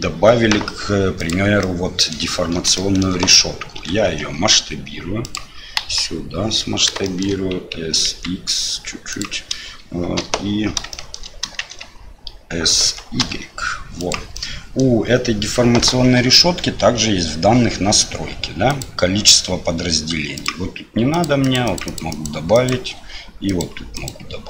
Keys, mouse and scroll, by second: 1.6 click, 2.8 shift+click, 3.7 s, 5.7 KP_1, 7.0 shift+click, 7.8 s, 10.1 KP_7, 10.9 shift+middle click, 11.6 shift+z, 12.8 s, 14.4 middle click, 18.7 click, 21.4 click, 21.8 click, 22.1 click, 23.5 click, 23.9 click.